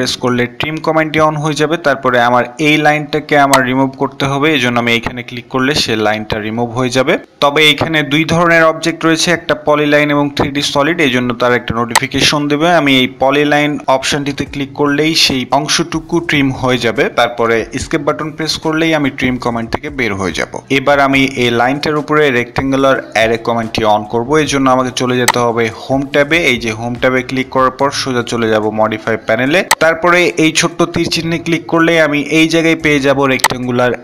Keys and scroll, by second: 16.5 Escape.